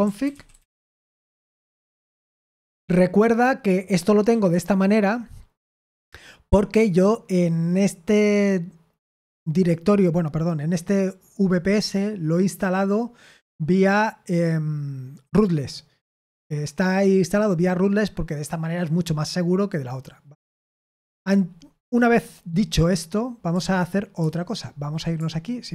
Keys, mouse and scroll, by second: 0.0-2.2 typing, 24.2 super+8.